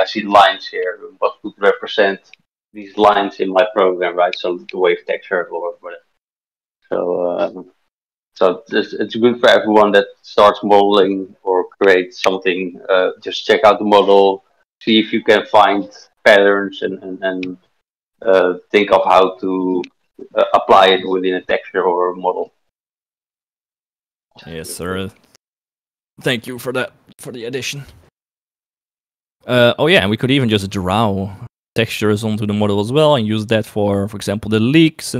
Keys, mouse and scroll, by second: 18.9 shift+middle click, 20.8 shift+middle click.